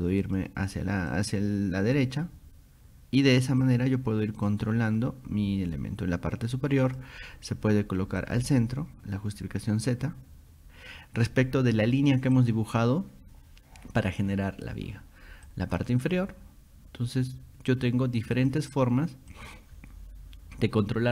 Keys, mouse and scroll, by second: 0.2 click, 1.1 click, 3.6 click, 4.5 click, 6.8 click, 8.2 click, 12.4 click, 15.5 click, 18.4 click, 19.3 click.